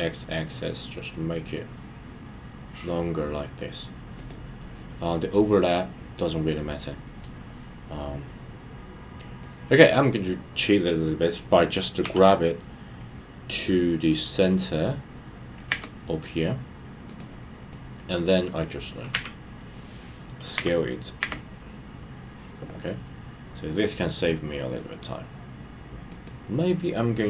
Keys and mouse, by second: 4.2 click, 4.6-6.2 middle drag, 6.8-7.2 middle drag, 9.4-10.2 middle drag, 17.0 click, 17.7-18.6 middle drag, 26.1 click.